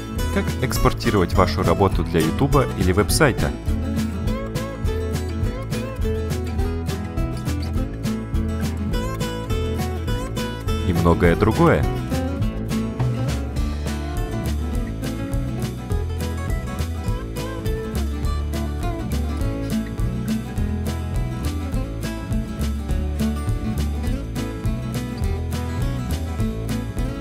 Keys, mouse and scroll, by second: 6.7 click, 7.1 ctrl+scroll up 1, 7.2 ctrl+middle click, 7.3 click, 7.8 click, 8.3 right click, 8.4 click, 8.6 click, 9.0 click, 14.3 click, 14.9 click, 20.8 click.